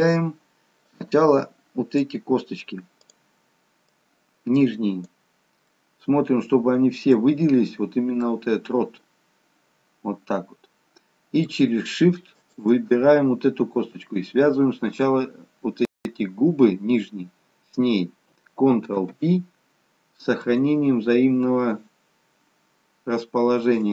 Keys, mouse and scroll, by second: 5.9 middle click, 8.4 middle click, 12.6 shift+click.